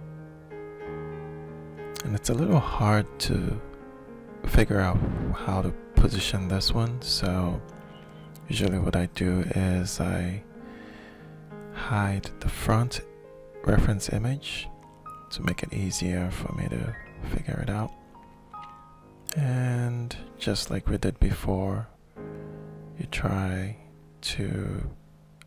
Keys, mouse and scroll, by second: 0.2 click, 1.3-2.3 middle drag, 3.2 click, 5.0 ctrl+shift+middle click, 6.2-9.9 drag, 14.0-15.2 middle drag, 15.3 middle click, 15.7 alt+shift+middle click, 18.1-22.1 drag, 22.4 shift+click, 23.3-24.5 shift+middle drag, 24.5-25.4 shift+drag.